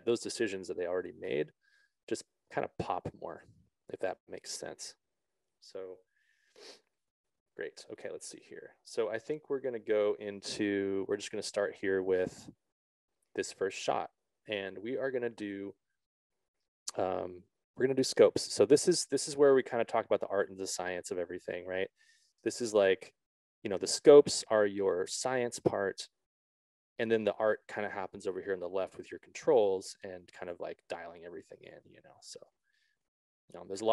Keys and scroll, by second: 33.4 ctrl+z.